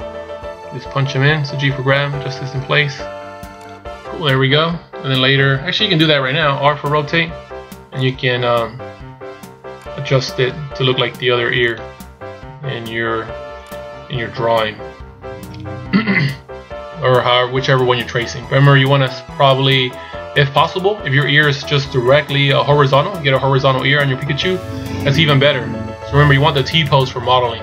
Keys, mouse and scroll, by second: 4.4 scroll down 2, 7.1 r, 8.7 g, 10.7 r, 12.5 g, 14.5 shift+scroll down 2, 15.9 shift+scroll down 4, 16.3-18.0 scroll up 1.